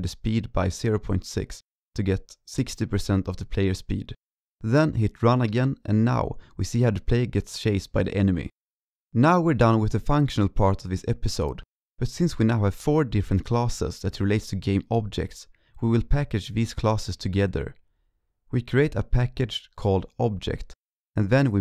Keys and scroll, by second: 1.8 ctrl+s.